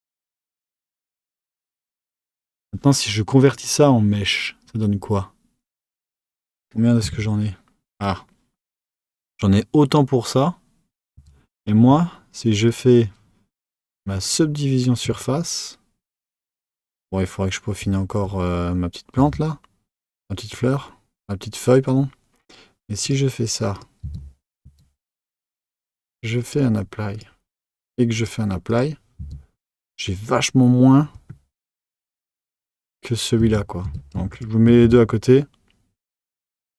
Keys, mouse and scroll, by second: 3.4-6.5 drag, 7.0 Tab, 11.1 Tab, 11.5 click, 12.6-15.7 drag, 19.2 Tab, 23.0 click, 24.0 Tab, 24.6 Tab, 26.4-29.2 drag, 29.2 Tab, 31.8 click, 32.2 Tab, 32.5 click, 33.4 Tab, 33.8 Tab, 34.3 shift+click, 34.8 Tab.